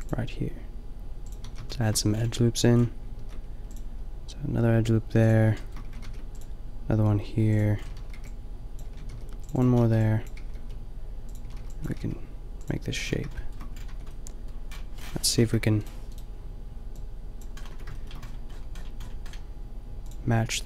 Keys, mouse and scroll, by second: 1.4 a, 2.2 middle click, 3.1 ctrl+r, 5.9 a, 6.0 ctrl+r, 7.9-10.4 typing, 9.1 ctrl+r, 11.4 a, 11.5 b, 11.8 g, 12.8 a, 13.9 Tab, 15.5 KP_5, 17.7 Tab.